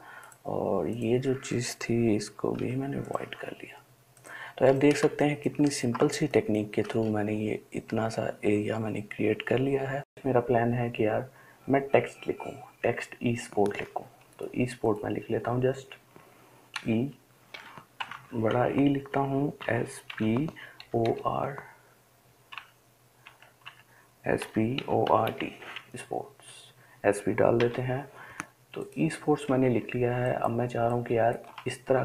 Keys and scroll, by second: 2.8 i, 5.3 space, 5.8 space, 17.0 e, 18.2 typing, 19.9-20.9 typing, 22.8 BackSpace, 23.5 BackSpace, 26.1-26.9 typing.